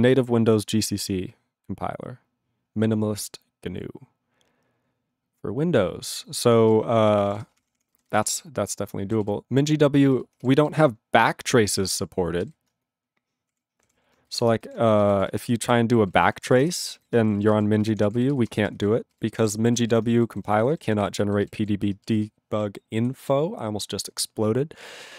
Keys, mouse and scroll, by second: 6.8 ctrl+s, 7.0 ctrl+a, 7.1 ctrl+space, 7.2 ctrl+e, 7.4 ctrl+space, 7.5 ctrl+a, 7.6 ctrl+p, 7.7 ctrl+p, 7.9 ctrl+n, 8.1 ctrl+n, 8.1 ctrl+e, 9.3 ctrl+s, 10.9 ctrl+s, 14.5 Return, 14.6 ctrl+s, 14.7-17.0 typing, 17.1 ctrl+space, 17.2 ctrl+e, 17.3 ctrl+n, 17.3 ctrl+e, 17.4 ctrl+n, 17.5 ctrl+e, 17.5 ctrl+n, 17.8 ctrl+g, 17.9 ctrl+p, 18.0 ctrl+p, 18.2 ctrl+f, 18.3 ctrl+f, 18.5 ctrl+space, 18.9 ctrl+alt+f, 19.1 ctrl+g, 19.5 ctrl+l, 19.9 ctrl+s, 20.3-20.7 alt+b, 21.0 alt+b, 21.1 alt+b, 21.3 alt+b, 21.4 alt+b, 21.9 ctrl+space, 22.2 ctrl+alt+f, 22.5 ctrl+alt+f, 23.5 ctrl+alt+f, 25.0 ctrl+g.